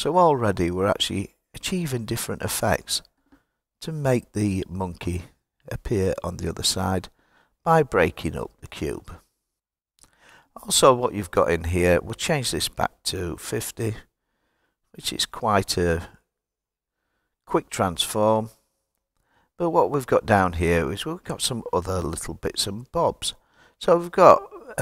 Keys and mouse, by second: 11.9-15.1 drag.